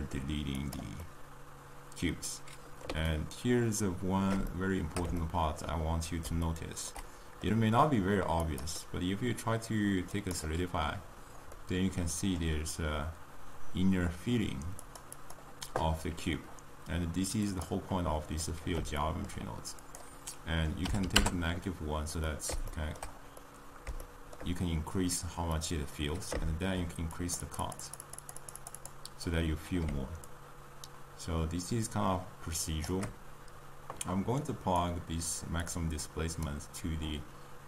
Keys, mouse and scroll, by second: 0.7 click, 1.3-10.3 middle drag, 10.3-11.5 drag, 11.5-14.9 middle drag, 14.9 click, 15.2 click, 17.4 click, 21.1-22.2 drag, 22.2-27.3 middle drag, 27.3-37.6 drag.